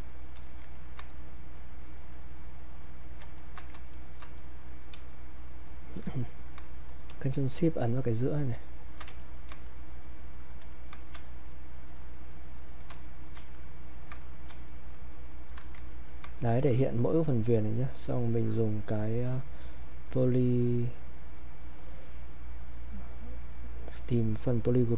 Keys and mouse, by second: 0.4 alt+click, 0.8 ctrl+right click, 1.1-3.4 drag, 3.9 ctrl+click, 4.4 click, 5.0 space, 5.4 click, 5.5 space, 6.2 ctrl+right click, 8.3 click, 9.2 ctrl+shift+right click, 9.7 click, 10.7 ctrl+right click, 11.9 ctrl+shift+click, 15.9 ctrl+right click, 16.9 alt+click, 18.4 click, 24.2 click.